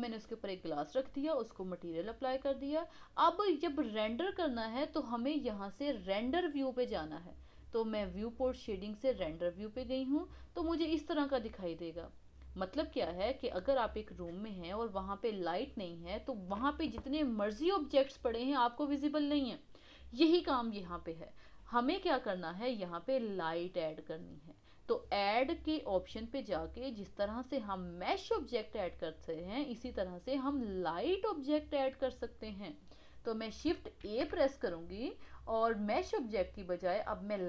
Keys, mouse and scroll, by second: 9.1 click, 10.3-13.4 middle drag, 26.0-29.1 drag, 34.0 shift+a.